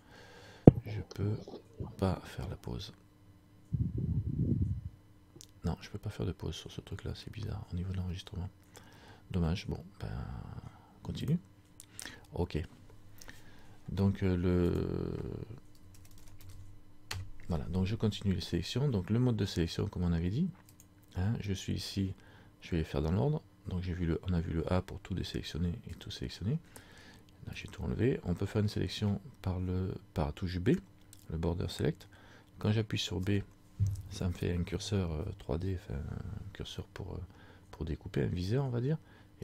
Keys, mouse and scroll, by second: 20.9 click, 23.5 click, 28.5 middle click, 28.5 scroll up 1.